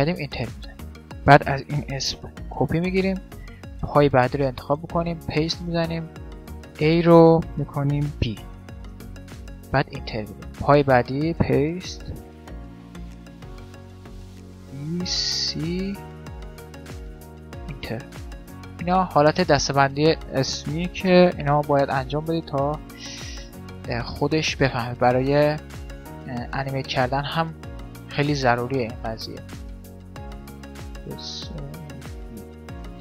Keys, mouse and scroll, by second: 0.9-2.7 drag, 3.9 right click, 4.7-6.5 drag, 10.5 right click, 11.2-12.5 middle drag, 12.5 click, 18.5 middle click, 19.1-20.9 right drag, 20.3-21.9 drag.